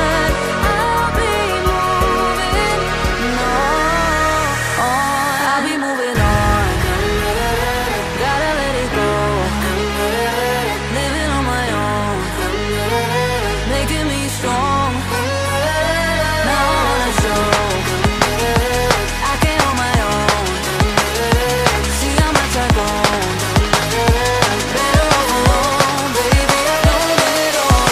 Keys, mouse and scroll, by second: 1.1 g, 1.7 r, 3.0 shift+d, 3.5-5.2 drag, 3.5 r, 4.7 g, 5.2 middle click, 5.2 a, 5.5 KP_1, 5.6 alt+shift+click, 6.1-10.6 alt+middle drag, 7.0 KP_1, 7.2 shift+a, 9.3 KP_0, 10.6 click, 10.6 n, 11.6-26.9 middle drag, 11.6 n, 18.3 r, 19.6 g, 20.5 a, 24.7 n, 25.7 n, 26.9-27.9 drag.